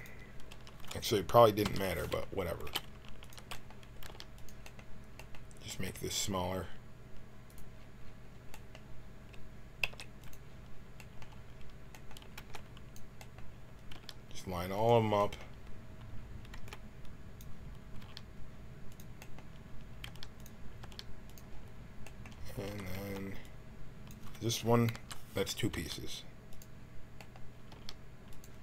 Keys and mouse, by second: 0.4-1.6 drag, 0.4 a, 1.6 l, 2.6 g, 4.0 g, 7.4-9.7 drag, 9.7 s, 12.3 b, 13.8 g, 16.5 b, 17.9 g, 20.0 g, 20.7 g, 22.6 a, 22.9 b, 24.8 l, 25.7 g, 27.6 g.